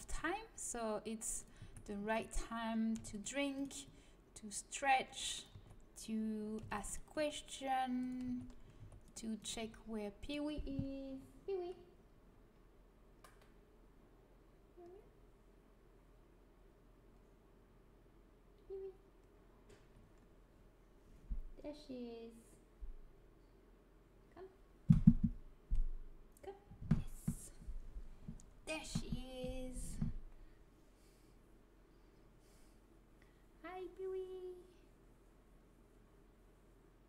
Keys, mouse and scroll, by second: 0.1 right click, 0.1 g, 1.5 a, 3.6-4.9 drag, 3.8 g, 5.5 a, 6.5 c, 7.1 g, 7.3-8.6 right drag, 8.2 a, 8.7 c, 9.4 right click, 9.5 g.